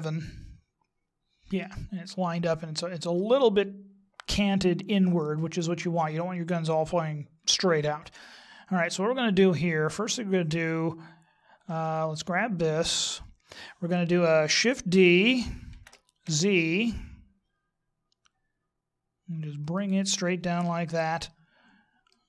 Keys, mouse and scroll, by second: 8.1 middle click, 11.1 right click, 12.9 right click, 15.7 shift+d, 20.5 KP_1, 22.1 middle click.